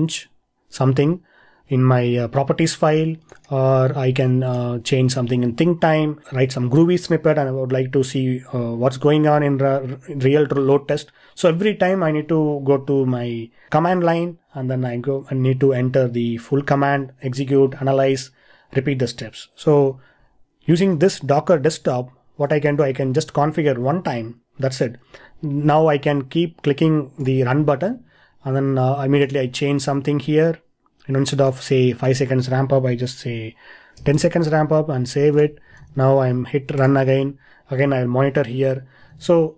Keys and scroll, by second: 20.9 super+Tab, 27.8 super+Tab, 35.8 super+Tab, 39.1 super+Tab.